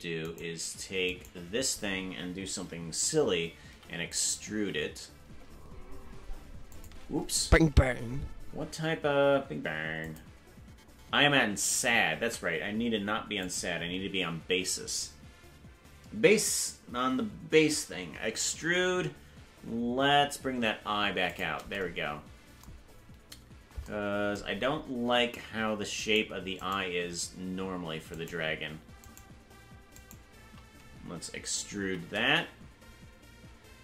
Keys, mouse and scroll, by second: 0.2 right click, 2.4 right click, 10.0 click, 11.6 ctrl+z, 13.4 click, 18.3 e, 26.0-33.8 right drag.